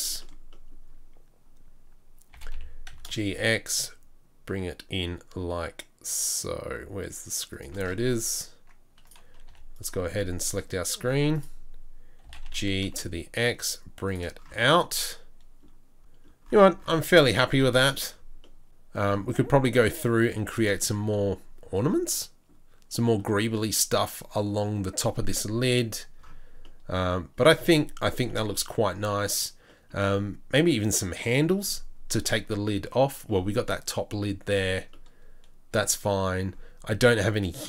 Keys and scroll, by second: 2.3 g, 7.9 Tab, 9.5 3, 10.1 2, 11.0 z, 12.2 g, 14.5 Tab.